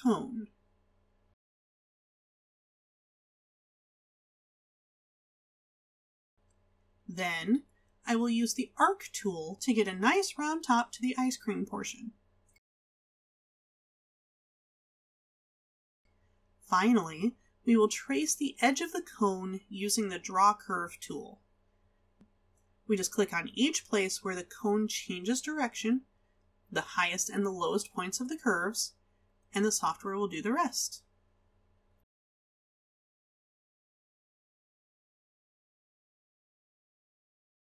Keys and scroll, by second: 4.6 space.